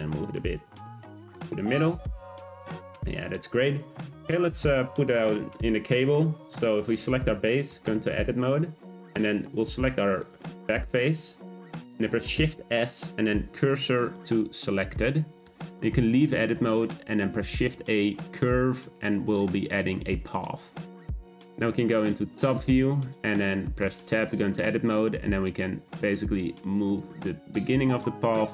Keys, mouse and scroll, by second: 2.5 click, 4.6-6.9 middle drag, 6.9 click, 7.6 Tab, 9.5 click, 10.2-12.2 shift+middle drag, 12.2 shift+s, 15.4 Tab, 15.8 click, 16.5 shift+a, 20.6-21.1 scroll down 3, 21.1 `, 23.8 Tab, 25.1 g.